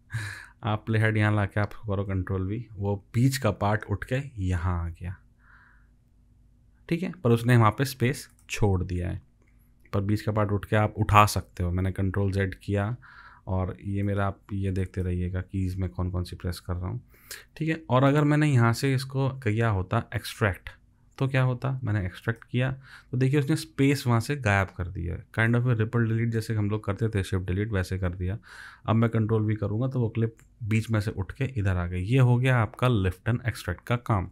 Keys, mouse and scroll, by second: 2.0 ctrl+v, 11.9 ctrl+z, 12.6 ctrl+z, 14.4 ctrl+z, 29.3 ctrl+v, 32.9 ctrl+z.